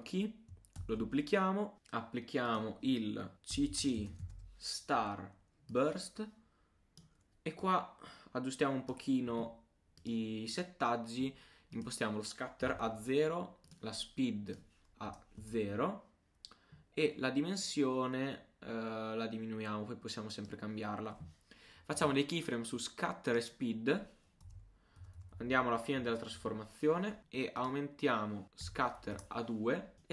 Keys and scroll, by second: 0.8 super+d.